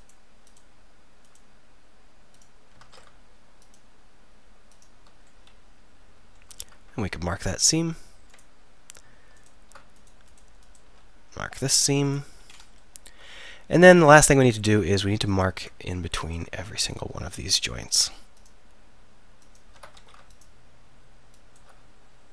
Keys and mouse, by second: 2.9 ctrl+z, 5.3 middle click, 5.9 middle click, 12.5 middle click, 15.3-16.4 drag, 20.0 ctrl+z.